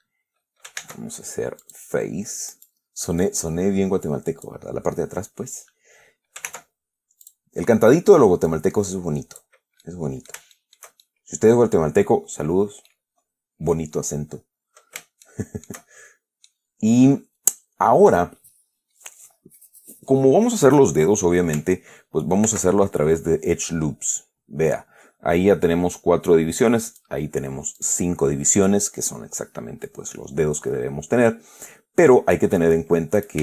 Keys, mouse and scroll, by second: 1.1 ctrl+Tab, 1.9 click, 2.8 right click, 3.5-4.9 drag, 6.8 ctrl+Tab, 7.5 click, 7.8 middle click, 8.1 right click, 8.8-9.9 drag, 10.1 click, 11.3 shift+click, 12.7 scroll down 2, 13.2-14.5 drag, 14.6 scroll up 2, 15.5 shift+middle click, 16.8-18.6 middle drag, 22.7 ctrl+r, 24.1 scroll up 2, 27.2 click, 28.1 click.